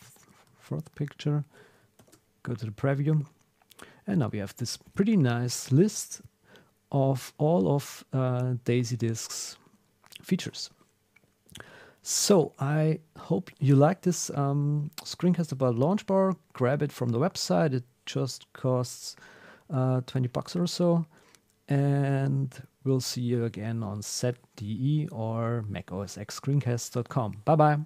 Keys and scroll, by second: 0.6 super+s, 2.0 ctrl+alt+super+p, 10.5 super+w.